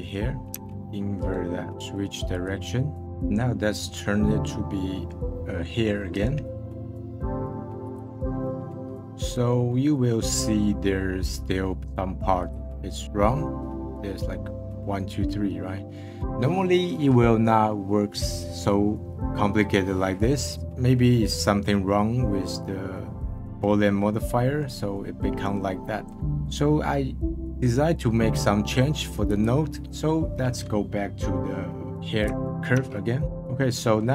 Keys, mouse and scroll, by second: 0.6 Tab, 0.7-1.2 scroll down 2, 1.2 right click, 2.9 scroll up 1, 3.0 click, 3.8-6.1 middle drag, 6.1-8.5 right drag, 8.5 middle click, 8.9-9.3 scroll up 1, 9.7 scroll up 2, 11.5 scroll down 1, 11.8 click, 15.7-16.1 scroll down 1, 16.1-16.9 scroll up 1, 20.5 middle click, 20.9-21.4 scroll down 1, 21.4-23.3 middle drag, 23.3 scroll up 2, 23.4-28.5 middle drag, 33.1 ctrl+z, 33.2-33.7 scroll down 5, 33.7-34.1 middle drag.